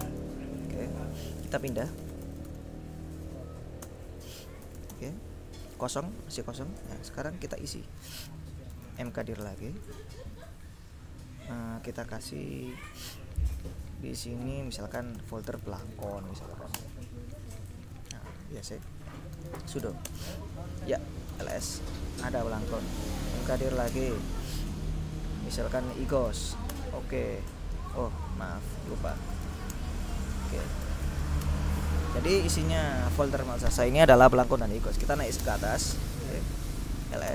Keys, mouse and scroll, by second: 0.1 Return, 1.3-3.2 typing, 3.9 Return, 4.8 l, 5.0 Return, 8.6-9.9 typing, 14.8-16.6 typing, 16.9 Return, 18.4 Up, 18.9 ctrl+a, 19.3-22.0 typing, 23.1-24.3 typing, 25.8-27.0 typing, 28.0 Up, 29.0 ctrl+s, 29.2 ctrl+d, 29.4 ctrl+o, 29.6 ctrl+space, 29.8 ctrl+Return, 30.9 ctrl+l, 31.3 ctrl+s, 31.5 ctrl+Return, 34.9-37.3 typing.